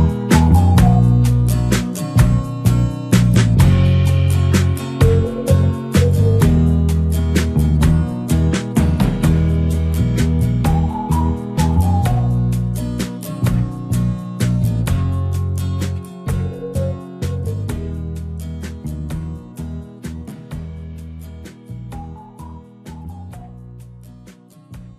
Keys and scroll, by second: 10.1 c, 10.9 c, 12.3 Caps_Lock, 13.2 Return, 13.8 ctrl+KP_Add, 14.6 alt+i, 14.8 alt+a, 15.6 ctrl+space, 16.3 ctrl+space, 17.7 s, 17.9 ctrl+space, 24.5 space.